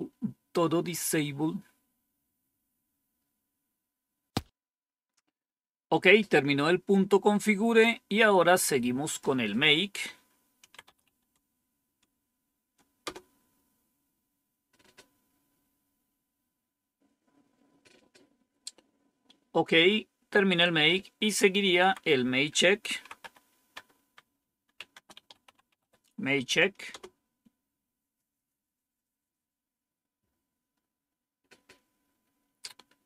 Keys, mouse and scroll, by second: 6.6-8.1 scroll down 5, 8.9 click, 10.2-11.4 typing, 12.9 Return, 15.6-16.6 scroll down 1, 19.5 Up, 21.6 Down, 22.5-26.2 typing, 26.8 Return.